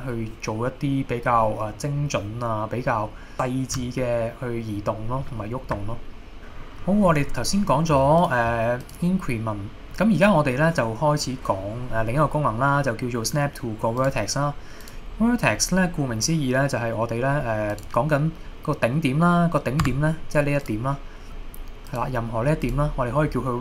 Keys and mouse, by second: 6.4 g, 6.4 x, 8.2 click, 8.8-14.4 drag, 14.9 click, 15.2 middle click, 17.7 click, 19.9 Tab, 20.7-22.9 drag.